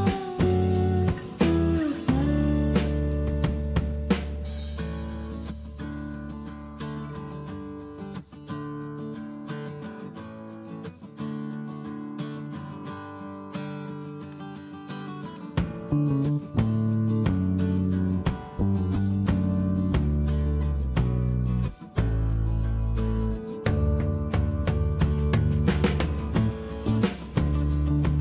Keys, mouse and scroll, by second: 12.7 shift+space, 22.0 space, 25.5 space.